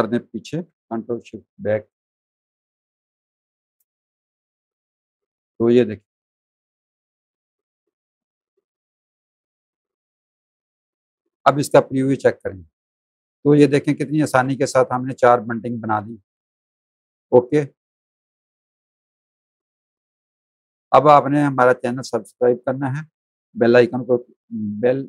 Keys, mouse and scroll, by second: 0.4 ctrl+shift+[, 2.7 click, 3.1 space, 3.2 click, 4.0 Tab, 6.2 z, 6.4 click, 6.9 z, 7.1 alt+click, 7.5 space, 8.8 click, 10.0 alt+click, 10.5 click, 19.7 space, 19.9 click.